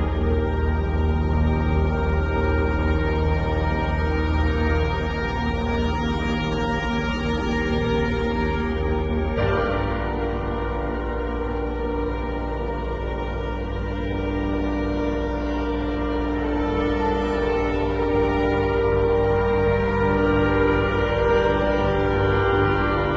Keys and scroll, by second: 0.1 z, 1.0 b, 4.5 ], 5.9 [, 6.7 [, 9.0 ], 9.9 [, 10.9 [, 12.0 [, 12.9 ], 15.0 z, 16.2 v, 19.1 super+], 21.8 super+-, 22.6 super+t.